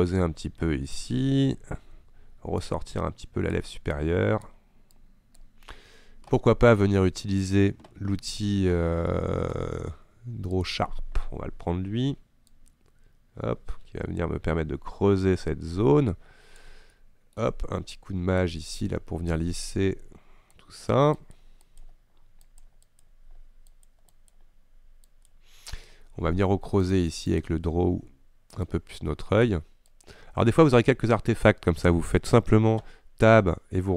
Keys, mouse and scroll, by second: 12.6-15.9 drag, 17.0-18.5 middle drag, 18.5-27.5 shift+drag, 28.7-30.9 ctrl+drag, 30.9-33.4 middle drag, 33.4 Tab.